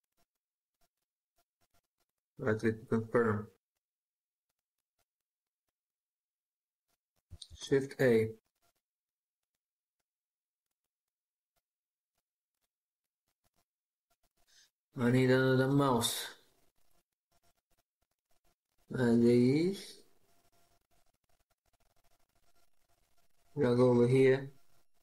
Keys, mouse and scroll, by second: 3.7 scroll down 1, 3.8 scroll up 1, 3.9 scroll down 1, 4.2 scroll up 1, 4.3 scroll down 1, 4.4 scroll up 1, 5.2 scroll down 1, 5.2 scroll up 1, 5.7 scroll down 1, 6.0 scroll up 1, 6.0 scroll down 1, 6.1-7.0 scroll up 1, 7.0 scroll, 7.3 a, 9.8 scroll down 1, 9.8 scroll up 1, 9.9-10.7 scroll down 1, 11.0 scroll up 1, 11.0 scroll down 1, 11.6 scroll up 1, 11.7 scroll down 1, 12.1 scroll up 1, 12.1-12.5 scroll down 1, 12.5-12.9 scroll up 1, 12.9 scroll down 1, 13.0-13.3 scroll up 1, 13.3-13.7 scroll down 1, 13.8-16.8 scroll up 1.